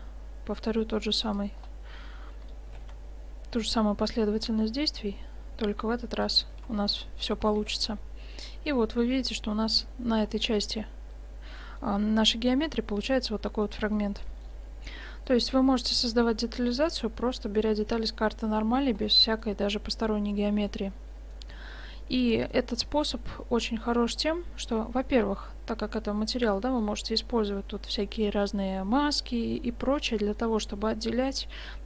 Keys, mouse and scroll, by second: 1.6-3.7 drag, 2.8 s, 6.6 Tab, 7.1-7.5 middle drag, 7.7 shift+z, 11.4-17.8 middle drag, 19.3-20.7 middle drag, 21.9-25.5 middle drag, 26.6 middle click.